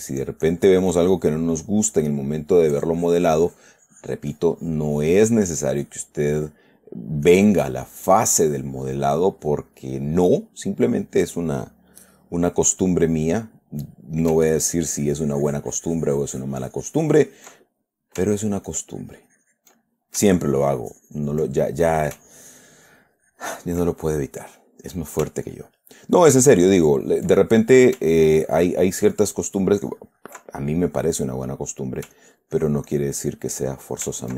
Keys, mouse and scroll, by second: 1.8-3.0 middle drag, 3.1-5.6 drag, 5.6 middle click, 6.1-10.4 drag, 10.4 middle click, 12.6 middle click, 14.0 middle click, 15.0-18.4 ctrl+drag, 17.9 ctrl+middle click, 18.8-20.6 ctrl+drag, 22.1 ctrl+click, 22.3 ctrl+middle click, 22.6-24.9 ctrl+drag, 24.9 middle click, 25.8-28.4 ctrl+drag, 28.4-30.8 ctrl+drag, 30.8 ctrl+middle click, 31.4 ctrl+middle click, 31.9 ctrl+middle click, 32.5-33.9 ctrl+drag, 34.0 ctrl+middle click.